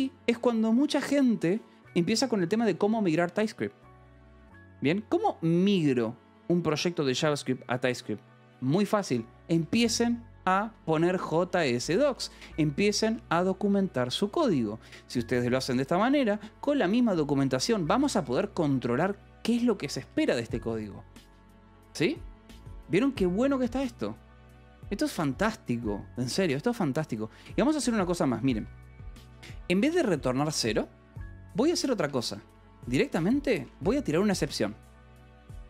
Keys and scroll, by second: 10.0-12.1 typing, 10.3 Escape, 13.1 Escape, 15.9-18.7 typing, 19.8 Escape, 20.4 k, 23.1 ctrl+s, 27.5 j, 29.3-30.1 typing, 31.9 a, 32.0 BackSpace, 33.1-34.4 typing.